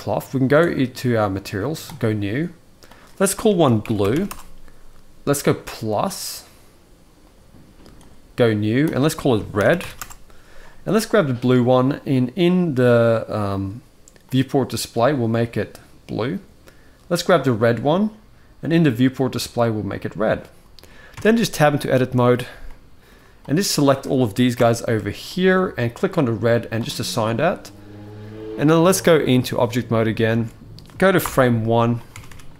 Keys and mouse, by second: 0.4 click, 1.6 click, 2.6-4.0 drag, 5.3 click, 8.7-9.7 drag, 10.8 click, 11.6 click, 13.3 click, 14.0 click, 18.8 click, 20.9 Tab, 21.5 shift+middle click, 22.4 middle click, 23.1 click, 24.3 ctrl+l, 25.0 shift+middle click, 28.2-29.4 drag, 30.1 alt+a, 31.0 shift+Left, 31.8 Tab, 32.0 Tab.